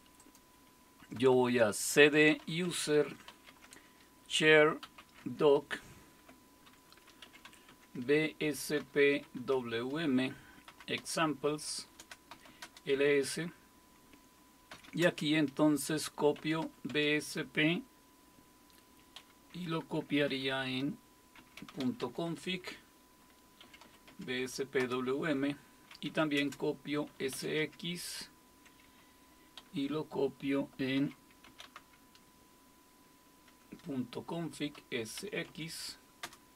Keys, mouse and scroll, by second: 0.2 click, 2.1-5.3 typing, 6.4-9.3 typing, 10.7-13.0 typing, 14.5-17.1 typing, 19.2 typing, 20.3-22.3 typing, 23.4-24.8 typing, 25.9-28.1 typing, 29.3-35.2 typing, 36.2-36.5 typing.